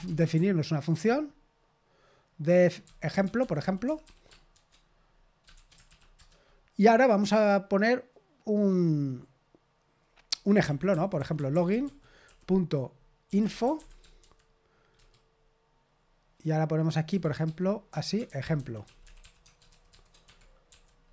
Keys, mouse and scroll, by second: 0.0-0.4 typing, 2.6-6.2 typing, 10.6-15.0 typing, 17.4-20.4 typing.